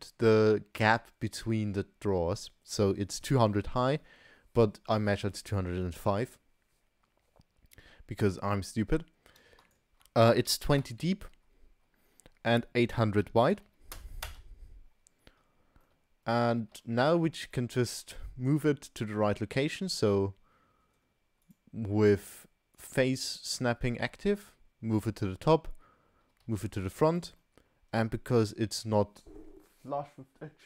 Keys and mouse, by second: 2.9-3.5 middle drag, 9.7-15.3 drag, 13.6 0, 15.9-16.3 shift+middle drag, 16.9 shift+drag, 17.1 shift+middle drag, 17.6 middle drag, 17.9 middle click, 18.6-19.1 middle drag, 19.2 middle drag, 21.4-23.4 drag, 24.3 g, 26.3 g, 27.4-27.9 middle drag.